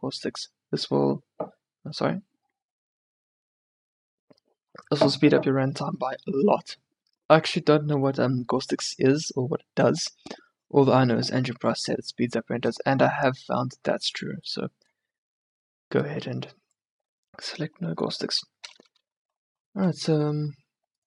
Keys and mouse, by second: 14.4 click, 18.1 middle click.